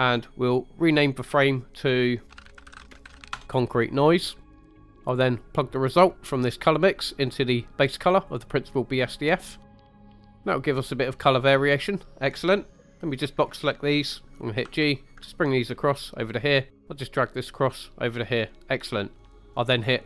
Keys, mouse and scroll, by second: 4.4 middle click, 4.7-5.0 scroll up 2, 5.0 click, 5.0 right click, 6.6-8.2 drag, 9.9 scroll down 1, 10.0-11.2 middle drag, 12.8-13.4 drag, 14.6 g, 16.3 click, 16.7-19.1 drag, 19.1 middle click, 19.3 middle click.